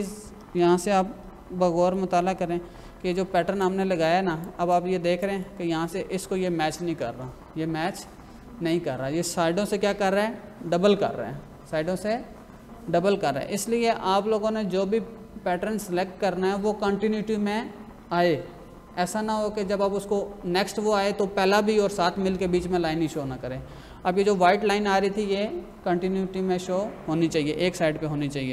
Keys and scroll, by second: 1.8 ctrl+=, 3.2 space.